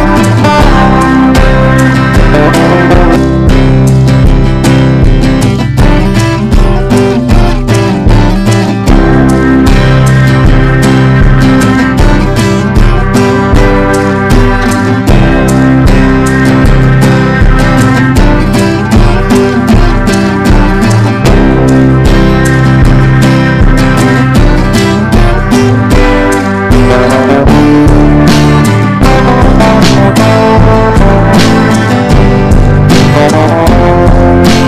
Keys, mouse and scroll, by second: 2.0-15.1 typing, 16.5 Return, 16.9-23.9 typing, 24.6 right click, 25.3-34.6 drag.